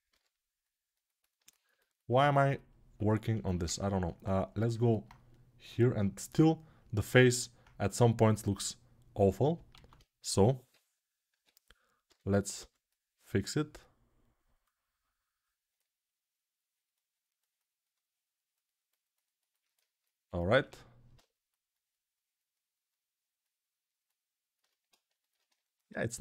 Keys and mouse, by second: 2.2-5.5 alt+right drag, 5.5-26.2 drag.